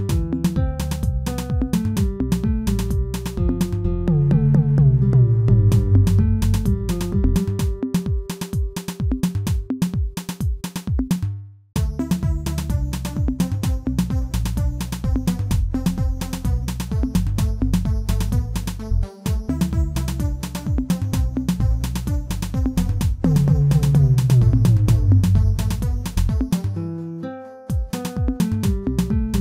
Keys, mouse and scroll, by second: 0.4-6.3 drag, 6.3 g, 8.7 click, 9.2 shift+middle click, 9.8 ctrl+z, 11.2 ctrl+z, 12.1 g, 14.3 click, 14.7 shift+middle click, 15.4 g, 20.1 click, 21.3 g, 23.0 click, 23.4 shift+middle click, 24.1 g, 25.9-27.0 shift+middle drag, 27.0 click, 27.3-28.6 middle drag, 28.6 h.